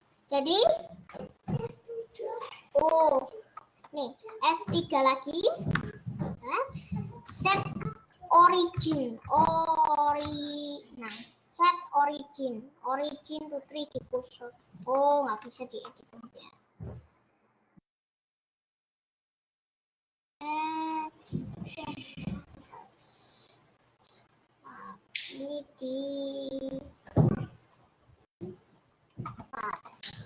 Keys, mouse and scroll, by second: 3.3 scroll down 2, 3.5 middle click, 3.9-4.3 scroll up 2, 4.3-16.4 middle drag, 16.4-16.8 scroll up 1, 18.0 middle click, 18.3-19.7 scroll down 1, 19.7 scroll down 1, 20.2-29.9 drag, 29.9-30.2 middle drag.